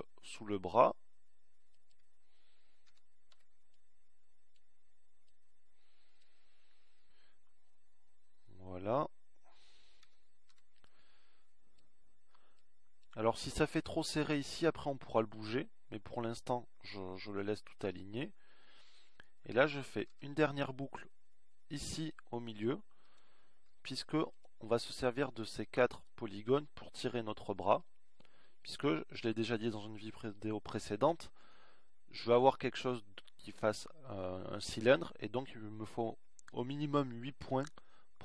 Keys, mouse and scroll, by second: 1.6 ctrl+r, 7.0 a, 7.5 b, 14.3 a, 14.8 b, 24.5 ctrl+r, 29.5-30.8 middle drag.